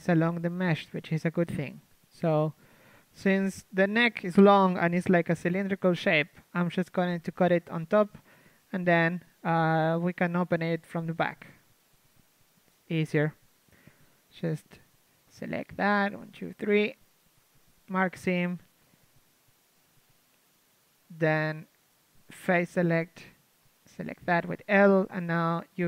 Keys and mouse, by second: 1.0 z, 1.9 ctrl+e, 1.9-3.2 middle drag, 2.7 KP_3, 3.2 ctrl+Tab, 3.8 a, 4.0 a, 5.1 l, 6.6 z, 9.3 z, 9.6-12.3 middle drag, 10.8 a, 15.1 ctrl+Tab, 17.4 ctrl+e, 18.2 a, 19.4 z, 20.4 z, 23.3 ctrl+Tab, 23.3 l, 25.2 shift+space.